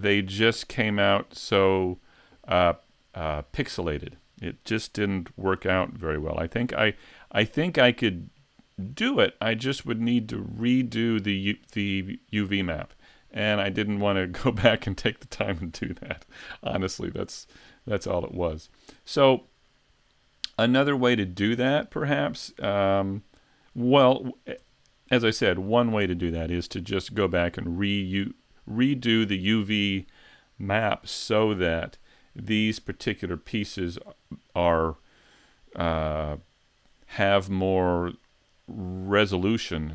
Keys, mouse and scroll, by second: 20.7-21.8 scroll down 3, 22.2 Tab, 24.6 Tab, 33.8 scroll up 3.